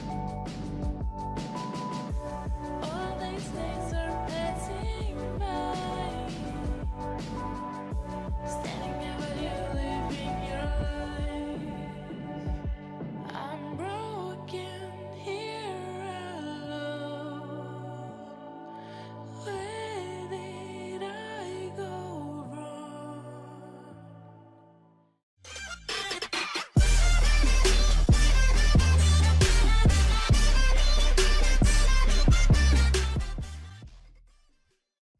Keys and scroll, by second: 0.5 ctrl+0, 6.5 ctrl+r, 6.9 ctrl+t, 9.6 ctrl+t, 13.7 ctrl+shift+s.